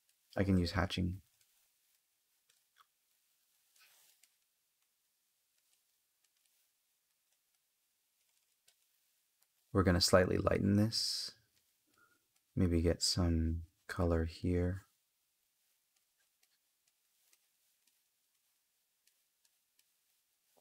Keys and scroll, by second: 1.1 space, 3.4 space, 17.2 space.